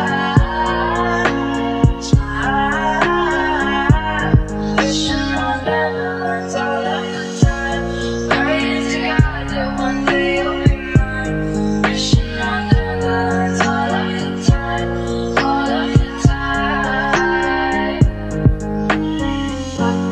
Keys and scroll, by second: 3.9 ctrl+space, 4.9 c, 6.0 space, 6.1 f, 6.7 Return, 11.5 ctrl+a, 16.1-17.8 typing, 18.8 e, 19.8 Return.